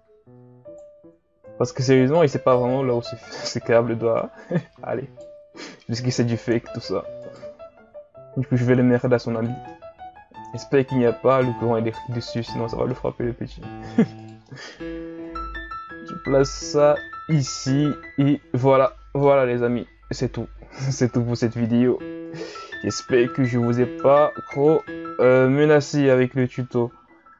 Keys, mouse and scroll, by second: 1.4 right click, 2.5-3.4 shift+scroll down 3, 3.4-4.2 ctrl+scroll up 1, 4.2 right click, 5.5-6.2 scroll up 2, 6.2-6.5 ctrl+scroll up 3, 6.5-7.2 shift+scroll down 5, 7.2 right click, 8.2 e, 9.7-14.2 middle drag, 14.2 right click, 14.5 middle click, 15.2-17.0 drag, 17.0 middle click, 17.8 Tab, 18.2 a, 18.4-18.9 scroll down 1, 18.9-19.8 middle drag, 19.8 KP_1, 21.0-22.3 shift+scroll up 10, 22.3 right click, 22.9 right click, 23.3-24.0 shift+scroll up 2, 24.0 Tab, 24.5 right click, 24.8-25.9 middle drag, 25.9-26.4 ctrl+scroll up 3, 26.4 Tab, 26.8 a, 27.2-27.3 scroll down 2.